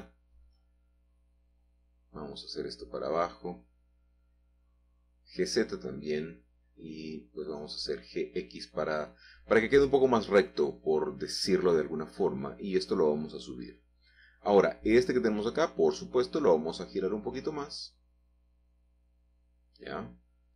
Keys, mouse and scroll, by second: 1.0 click, 2.5 g, 3.0 z, 4.2-5.3 drag, 5.6 g, 6.0 y, 6.6 Escape, 7.1 g, 7.6 g, 9.6-10.8 drag, 12.1 click, 13.0 g, 15.5-16.5 drag, 18.0 r, 20.2 y.